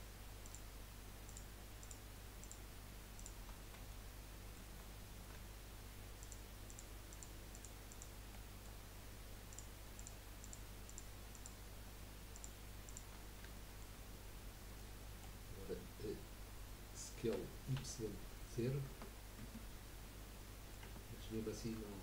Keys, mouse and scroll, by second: 0.4 shift+click, 1.2 shift+click, 1.8 shift+click, 2.4-3.6 shift+drag, 4.0 shift+middle click, 4.9 scroll up 1, 6.2 shift+click, 6.7 shift+click, 7.1 shift+click, 7.5 shift+click, 7.9 shift+click, 8.3-9.5 shift+middle drag, 9.5 shift+click, 10.0 shift+click, 10.4 shift+click, 10.9 shift+click, 11.3 shift+click, 12.3 shift+click, 12.8 shift+click, 13.2 scroll down 3, 13.5 shift+middle click, 14.0 scroll up 1, 14.7-17.8 middle drag, 17.8 s, 20.3 middle click, 20.8 Tab, 21.2 scroll up 1, 21.4-22.0 middle drag.